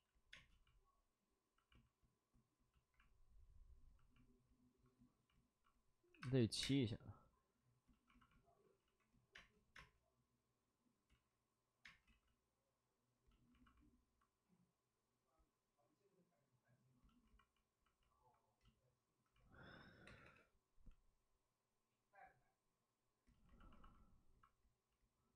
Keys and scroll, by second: 0.3 space, 2.7 space, 2.7 ctrl+z, 6.1 7, 6.1 space, 6.6 space, 8.8 ctrl+z, 9.3 space, 11.0 ctrl+z, 11.0 space, 11.8 space, 12.0 ctrl+z, 20.2 3.